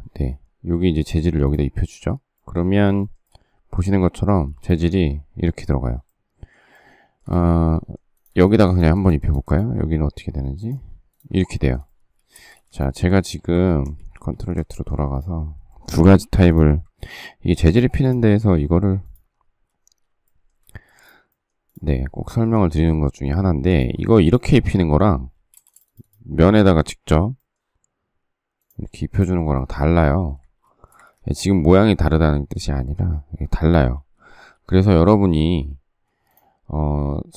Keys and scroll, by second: 4.3 space, 12.3 shift+space, 12.5 Escape, 13.6 ctrl+z, 16.2 m, 20.8 shift+space, 25.5 space, 30.3 space, 30.9 Escape, 30.9 space, 31.0 Escape, 33.9 ctrl+z, 35.4 ctrl+z.